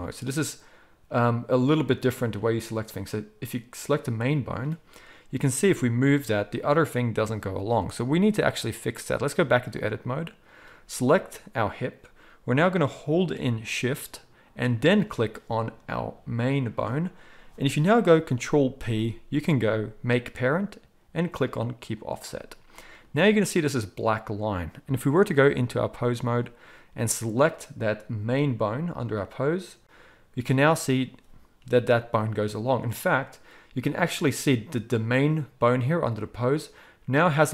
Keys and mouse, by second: 5.5 g, 8.1-10.5 drag, 10.5-14.8 middle drag, 14.8 shift+click, 14.9-18.7 shift+middle drag, 18.7 ctrl+p, 22.4-25.3 middle drag, 25.3-27.3 drag, 27.3-28.9 middle drag, 28.9 click, 29.0-37.5 middle drag, 31.6 g.